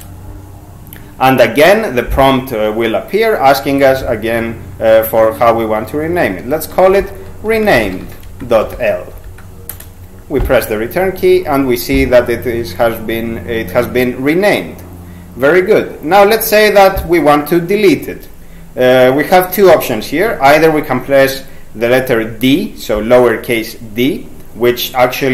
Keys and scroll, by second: 6.5-9.3 typing, 9.7 Return, 22.4 d.